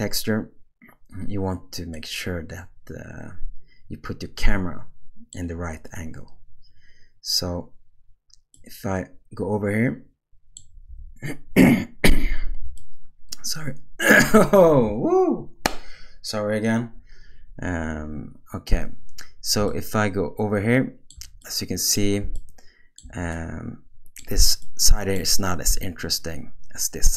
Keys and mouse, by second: 2.0-5.3 middle drag, 8.5-10.6 middle drag, 12.8-14.2 shift+middle drag, 19.7-21.1 shift+middle drag, 21.4-21.9 middle drag, 22.4-23.0 shift+middle drag, 23.3 middle click, 24.6 middle click, 25.7-27.1 middle drag.